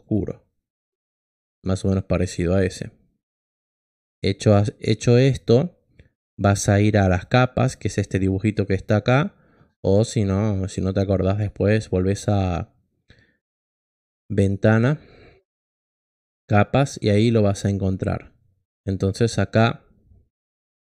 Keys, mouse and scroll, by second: 0.0 click, 14.3 click, 15.3 click, 20.7 click.